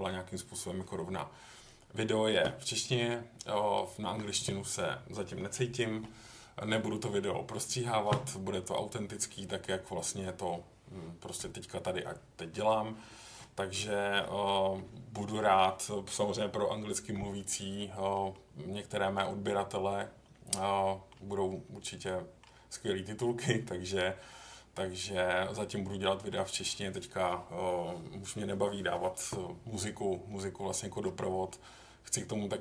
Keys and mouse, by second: 18.3 middle click, 20.8 middle click, 22.0 middle click, 26.0 middle click, 30.3 middle click.